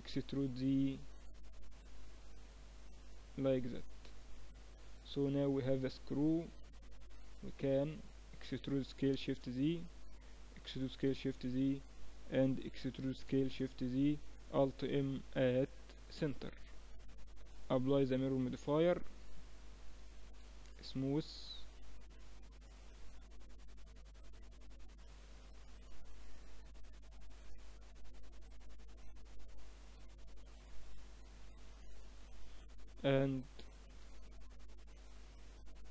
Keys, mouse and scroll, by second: 2.8 e, 4.4 Tab, 4.6 middle click, 6.2 Tab, 8.3 e, 10.3 e, 12.4 e, 14.6 alt+m, 16.2 Tab, 17.4 ctrl+2, 20.8-21.9 drag, 21.2 t, 21.9-24.0 middle drag, 22.6 Tab, 24.0 ctrl+r, 29.6 ctrl+r, 32.2-35.9 middle drag, 33.7 ctrl+r.